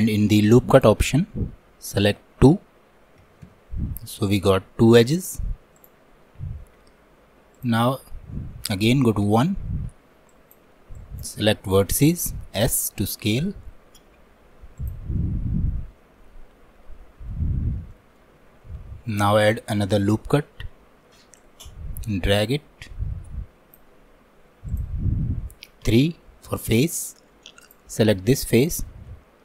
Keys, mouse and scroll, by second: 6.5 scroll up 1, 7.6-12.6 drag, 12.6 s, 15.2-19.1 middle drag, 19.1-25.9 drag, 25.9 3, 28.3-29.4 middle drag.